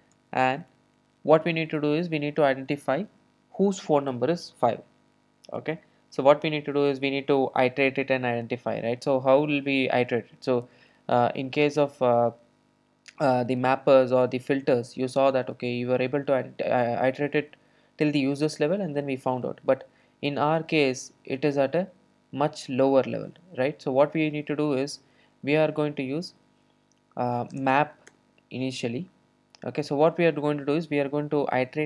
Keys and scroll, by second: 28.1 Return.